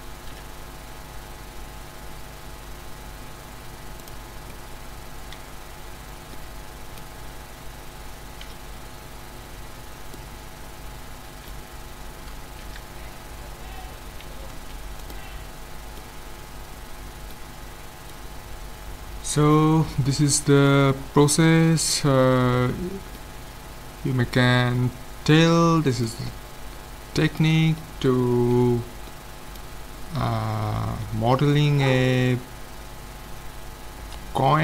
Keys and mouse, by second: 0.3 g, 4.3-5.8 middle drag, 5.8 z, 8.6 KP_5, 12.7 a, 14.6 ctrl+s, 18.0-24.7 middle drag, 31.3-32.7 middle drag.